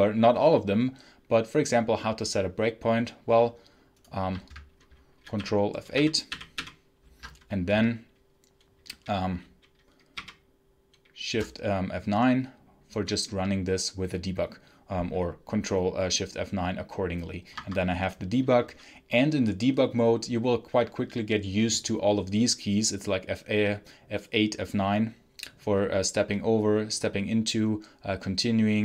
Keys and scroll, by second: 5.3 ctrl+F8, 5.8 ctrl+F8, 6.2 ctrl+F8, 6.5 ctrl+F8, 10.0 shift+F9, 17.4 Escape.